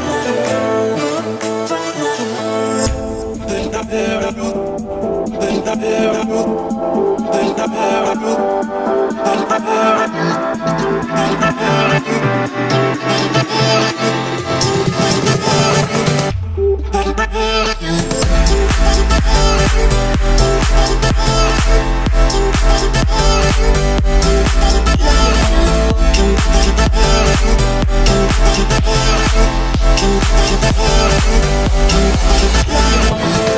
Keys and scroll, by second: 1.4 o, 2.3 Escape, 4.0 8, 5.5 Return, 10.0 1, 10.7 Return, 24.4 1, 25.3 2, 26.9 2.